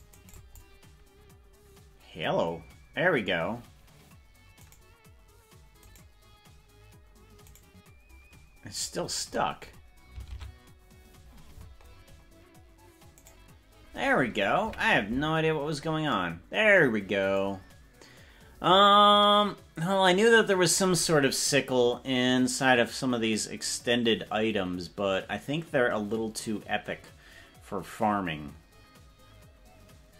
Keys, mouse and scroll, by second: 0.2 right click, 0.3 click, 4.7 right click, 5.9 right click, 7.7 right click, 9.1-10.1 scroll up 19, 10.5 ctrl+Tab, 11.3-12.5 scroll down 23, 13.5 right click, 14.7 KP_Decimal, 15.5-16.1 scroll down 3, 15.9 scroll up 1.